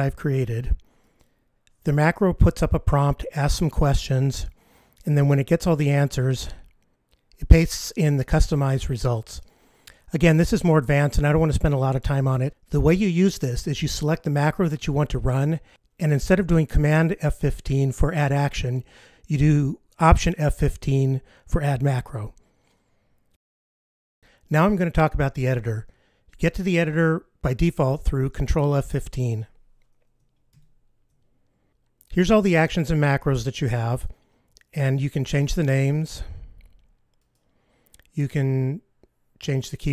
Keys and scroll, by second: 28.9 ctrl+F15.